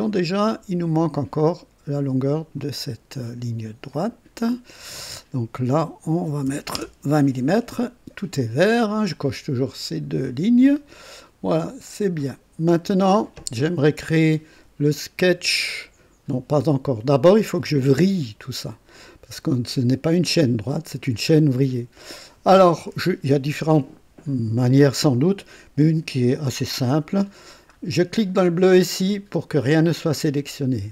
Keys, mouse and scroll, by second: 0.0-1.1 drag, 2.3 click, 3.9 click, 6.2 KP_2, 6.4 KP_0, 6.7 KP_Enter, 11.6 click, 28.8 click.